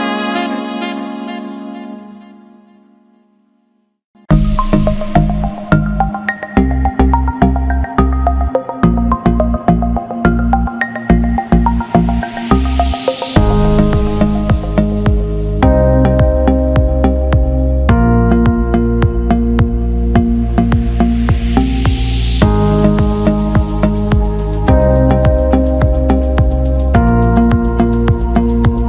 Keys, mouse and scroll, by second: 1.5 alt+middle drag, 1.8 alt+shift+middle drag, 2.1 alt+middle click, 2.7 alt+middle click, 3.0 alt+shift+middle drag, 3.5 alt+shift+middle drag, 4.0 click, 4.8 click, 5.1 click, 5.8 click, 6.4 click, 8.0 click, 8.4 click, 9.9-11.2 alt+middle drag, 11.4 alt+shift+middle click, 16.0-17.2 drag, 17.7-20.0 alt+middle drag, 20.9 alt+shift+middle click, 21.2-21.7 alt+middle drag, 22.9 alt+shift+middle drag, 23.2 alt+middle click, 24.9 alt+middle click, 25.3 alt+shift+middle click.